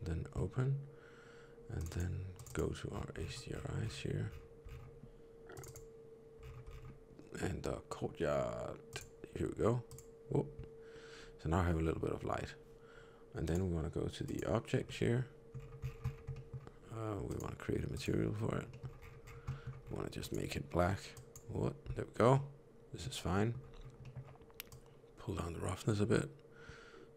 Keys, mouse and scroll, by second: 13.3 click, 14.8 middle click, 15.5 scroll down 2, 16.2 scroll down 13, 16.3 middle click, 17.2 click, 18.6 middle click, 18.9-19.3 scroll up 12, 19.3 middle click, 19.7-20.3 scroll up 2, 20.1 click, 22.3 middle click, 23.2 middle click, 23.6 scroll up 1, 23.9 middle click, 24.6 click.